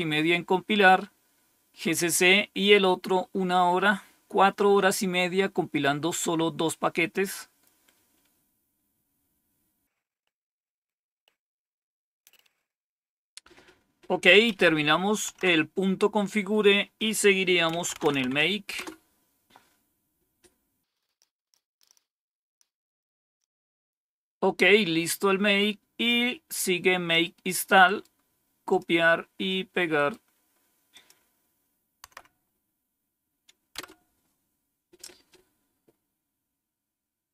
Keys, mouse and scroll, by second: 15.2 Down, 16.9 click, 17.4-18.6 typing, 18.7 Return, 20.6-21.3 typing, 20.9 scroll down 1, 21.0 click, 26.0-27.1 drag, 27.8 right click, 28.6 click, 29.9 right click, 30.6 right click, 30.8 click, 32.0 Tab, 33.7 Return.